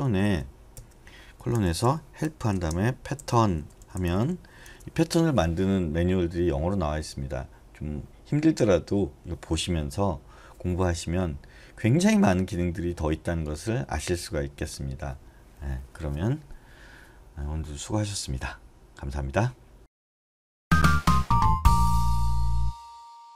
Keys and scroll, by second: 0.0-0.2 typing, 2.0-4.7 typing.